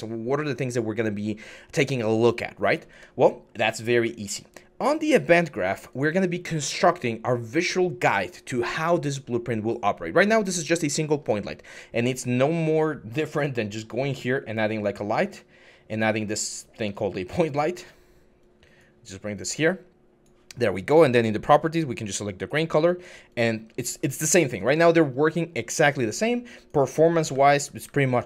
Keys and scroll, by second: 16.6 s, 24.1 typing, 27.1-28.2 typing.